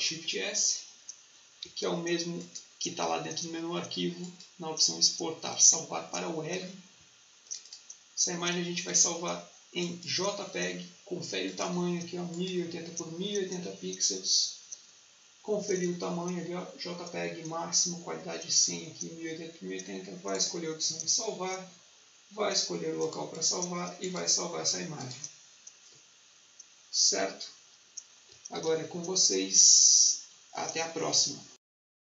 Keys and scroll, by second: 1.5 Escape, 28.5 ctrl+s.